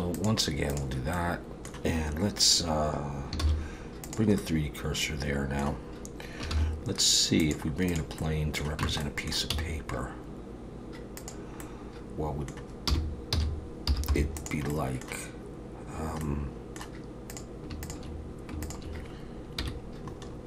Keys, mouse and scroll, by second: 1.1 middle click, 3.4 shift+s, 4.4 middle click, 6.5 shift+a, 8.2 middle click, 8.8 Tab, 9.0 middle click, 9.5 s, 11.6 middle click, 12.9 r, 14.7 middle click, 16.3 middle click, 17.3 click, 17.8 shift+click, 18.6 click, 19.6 KP_1, 20.2-20.4 scroll up 4.